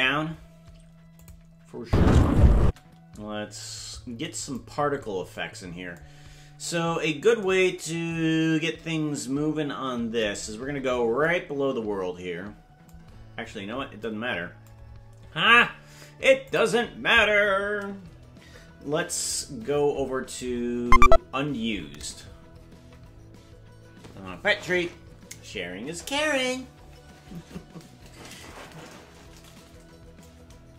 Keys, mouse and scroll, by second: 1.2 click, 1.8 space, 2.6 space, 4.8 scroll down 5, 10.5-11.2 scroll down 13, 13.4-13.8 scroll up 12, 14.8-16.0 scroll up 4, 16.4 click, 19.7-20.2 scroll down 12, 20.4-21.2 scroll up 5, 21.5-22.8 scroll down 22.